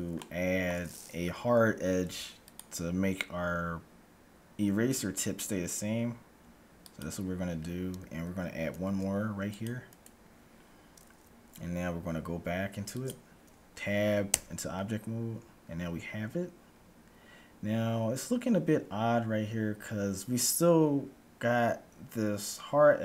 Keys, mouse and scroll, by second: 2.1 ctrl+r, 8.7 ctrl+r, 10.6-12.1 scroll up 1, 12.1 scroll up 1, 12.2 middle click, 13.1-14.6 drag, 14.2 Tab, 18.1-20.1 scroll up 1, 20.1 scroll up 1, 21.6-23.0 middle drag.